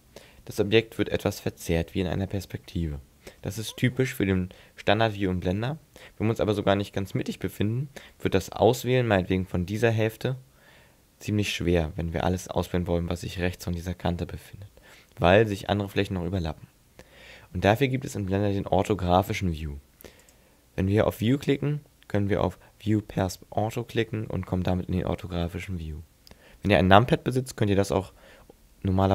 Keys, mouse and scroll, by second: 6.0 shift+middle click.